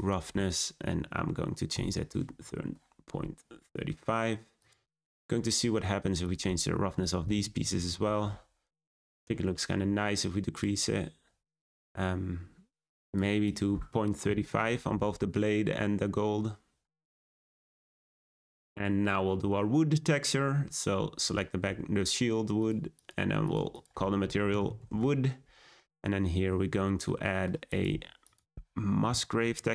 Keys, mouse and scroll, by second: 2.5-3.5 drag, 4.6 click, 7.7-10.5 drag, 11.6-17.8 drag, 19.0 scroll down 1, 20.1 scroll up 1, 22.6-23.5 drag, 23.7 click, 24.8 o, 26.1-27.0 scroll down 4, 27.0-27.5 scroll down 3, 27.6 click.